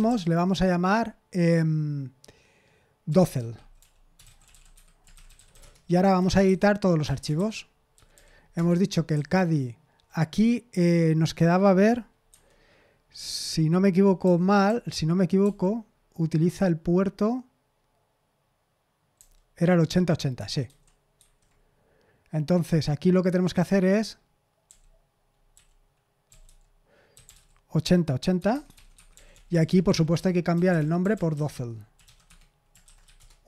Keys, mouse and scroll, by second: 0.0-0.6 typing, 2.8-10.5 typing, 12.2 super+7, 14.2-15.4 typing, 19.1 u, 20.6 super+7, 21.1 super+8, 24.6-33.4 typing.